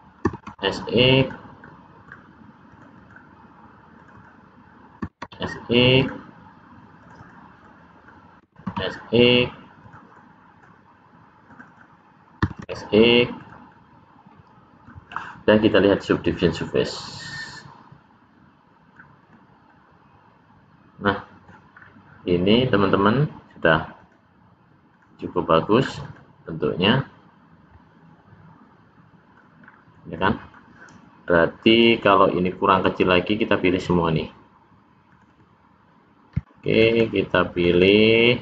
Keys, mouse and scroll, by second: 0.1 s, 1.6 middle click, 2.6 click, 2.9 click, 3.9 click, 4.1 click, 4.9 s, 6.9 click, 7.1 click, 7.6 scroll down 1, 7.7 middle click, 8.4 s, 10.1 middle click, 11.5 click, 11.7 click, 12.4 s, 13.7 middle click, 16.0 click, 16.6 scroll up 1, 19.3 click, 19.7 middle click, 21.8-22.3 scroll down 2, 24.0 click, 24.9 click, 25.4 middle click, 26.1 click, 26.4 middle click, 29.6-30.2 scroll up 2, 30.2 middle click, 32.0 middle click, 35.1 click, 35.3 click, 36.7 shift+click, 37.0 shift+click, 37.5 shift+click, 37.8 shift+click.